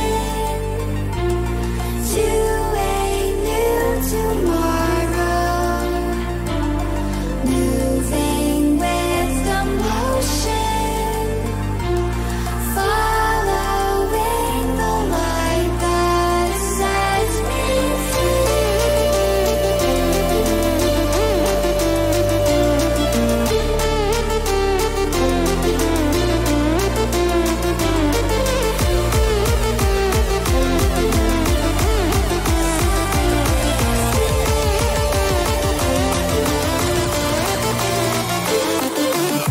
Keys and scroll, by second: 3.6 0, 6.2 Return, 26.2 ctrl+shift+n, 27.1 Return, 30.8 ], 34.9 ctrl+t.